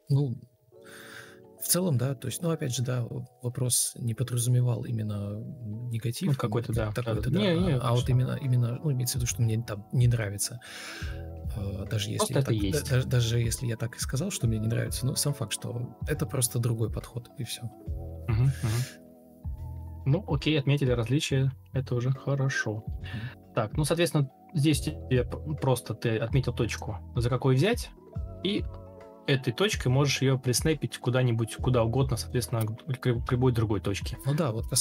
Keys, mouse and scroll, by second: 3.1 Delete, 3.2 Delete, 11.4 Escape, 11.7 Escape, 11.9 typing, 14.6 Escape, 14.7 typing, 17.5 ctrl+m, 19.2 Delete, 19.4 Delete, 22.8 ctrl+c, 22.9 ctrl+space, 23.2 ctrl+space, 23.5 ctrl+super+c, 30.7 Escape, 31.9 BackSpace, 32.1 BackSpace, 32.2 BackSpace.